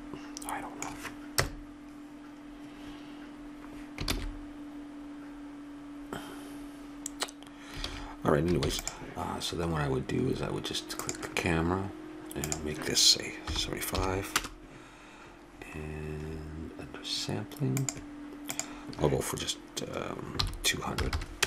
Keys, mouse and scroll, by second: 1.3 KP_0, 4.2 shift+z, 8.0 shift+z, 8.7 ctrl+s, 11.0-14.3 drag, 14.4 \, 17.8-19.4 drag, 21.2 0.